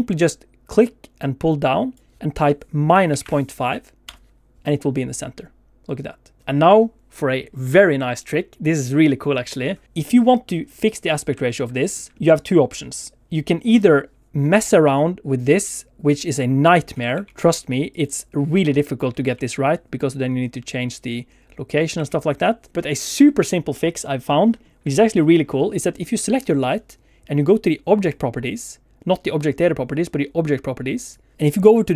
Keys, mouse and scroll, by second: 0.8 click, 5.3 middle click, 10.6 scroll up 2, 11.5 shift+middle click, 11.8 scroll down 2, 12.1 shift+middle click, 14.7 click, 17.2 ctrl+z, 17.9 click, 19.3 ctrl+z, 20.1 click, 22.0 ctrl+z, 24.5 scroll down 1, 24.9 shift+middle click, 25.1 middle click, 31.0 click.